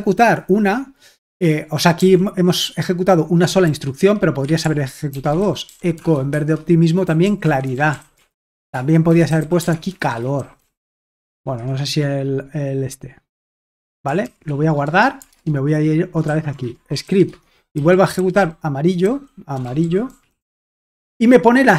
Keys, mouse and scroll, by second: 2.0 i, 3.6-12.1 typing, 14.0-15.0 typing, 15.4 alt+Tab, 16.0-20.9 typing.